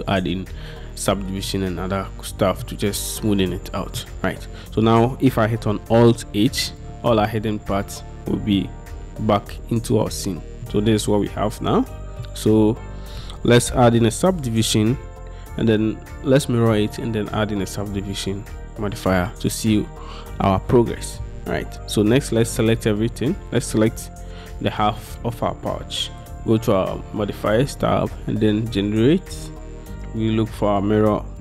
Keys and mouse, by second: 1.5-2.7 middle drag, 3.6 middle click, 6.4 alt+h, 8.7-10.7 middle drag, 10.8 Tab, 11.2-12.3 middle drag, 26.3 middle click, 27.6-31.4 middle drag.